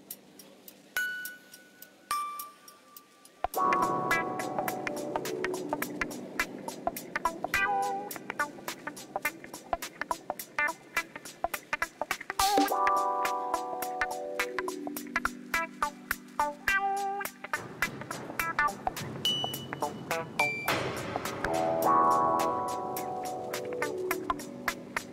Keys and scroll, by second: 0.6 g, 1.5 r, 2.0 g, 3.6 r, 4.1 z, 4.9 g, 6.9 shift+d, 7.1 shift+z, 7.9 Escape, 9.6 m, 11.2 ctrl+z, 11.5 shift+d, 12.7 r, 13.2 g, 13.3 z, 14.7 m, 15.8 m, 16.8 Return, 17.3 shift+d, 17.5 shift+z, 18.5 z, 19.7 m, 21.1 0, 22.8 shift+d, 23.6 shift+z, 24.3 m, 24.9 s.